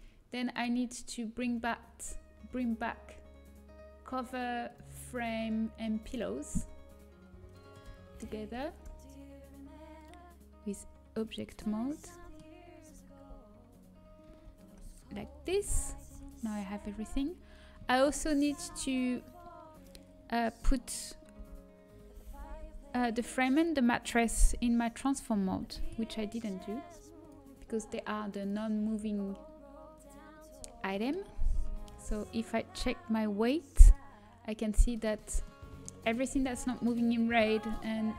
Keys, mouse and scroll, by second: 4.6-10.2 drag, 11.1-12.4 drag, 12.4-13.7 middle drag, 16.0 ctrl+j, 16.0 Tab, 16.1 a, 16.9 a, 18.3-20.6 middle drag, 18.9 a, 20.8-22.7 drag, 21.3 l, 22.3 l, 22.5 l, 23.0 middle click, 27.3 ctrl+i, 27.3-34.6 drag, 27.3 l, 33.9 a, 35.4-38.1 middle drag.